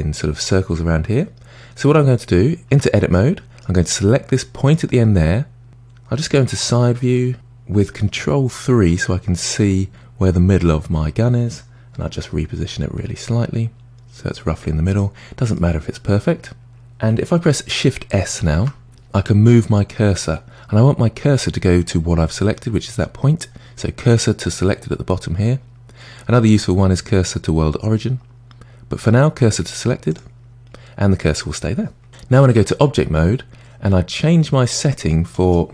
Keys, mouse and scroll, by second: 1.3-2.7 scroll up 1, 2.7 Tab, 3.1-4.7 middle drag, 4.7 click, 6.3 KP_1, 7.3 KP_3, 12.0 g, 15.5-17.0 middle drag, 18.5 shift+s, 32.5 Tab, 35.3-35.7 drag.